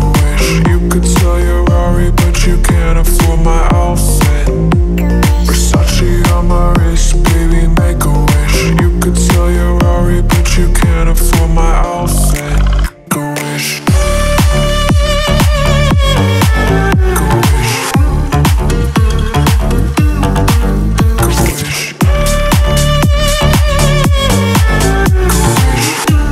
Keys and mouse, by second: 1.8 Tab, 2.5 click, 2.7 drag, 4.5 middle click, 10.3-10.9 drag, 11.1 middle click, 11.3 click, 12.8 click, 13.6 click, 13.8 middle click, 14.4-14.7 drag, 14.9 click, 15.1-15.5 middle drag, 15.9-16.3 middle drag, 16.4 middle click, 17.1 middle click, 17.5-17.8 middle drag, 18.2-18.6 middle drag, 18.9 middle click, 19.1 middle click, 19.8 middle click, 20.3-21.3 middle drag, 21.5 middle drag, 21.7-22.0 middle drag, 22.1 middle click, 23.6-24.9 middle drag, 25.5 middle click.